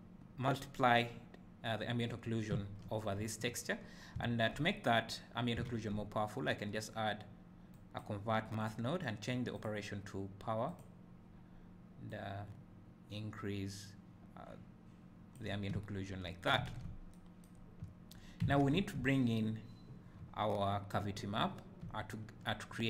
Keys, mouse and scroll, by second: 5.7-6.3 drag, 8.6 click, 9.5-22.8 drag, 15.9 `, 17.9 `.